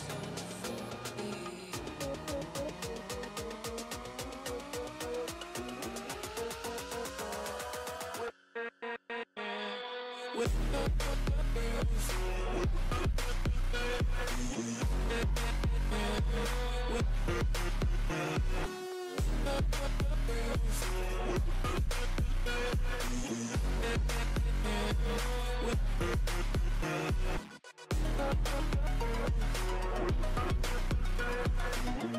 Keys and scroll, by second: 0.1 [, 3.2 ], 4.6 ctrl+z, 7.3 ctrl+z, 8.8 ctrl+z, 10.7-13.6 typing, 14.5 ctrl+z, 17.3 ctrl+z, 22.7 ctrl+z, 23.8 ctrl+z, 23.9 ctrl+z, 24.1 [, 24.2 [, 24.6 ctrl+z, 25.7-26.5 typing, 26.8 ctrl+z, 27.8 ctrl+z.